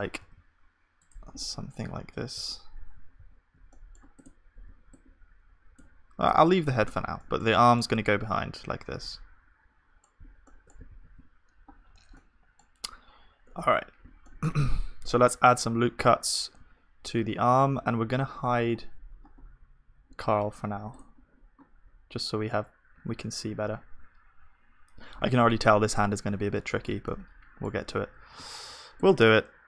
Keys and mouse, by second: 0.1 g, 2.3 x, 2.9 x, 3.2 z, 3.7-6.3 middle drag, 4.8-6.3 drag, 4.8 b, 6.3 Tab, 7.2-9.4 middle drag, 8.0 z, 10.9 ctrl+s, 11.2-17.0 middle drag, 13.7 KP_1, 17.4-22.4 middle drag, 17.7 Tab, 21.1-22.9 drag, 22.4 Tab, 22.9 Tab, 26.2-29.6 middle drag, 27.9 Tab.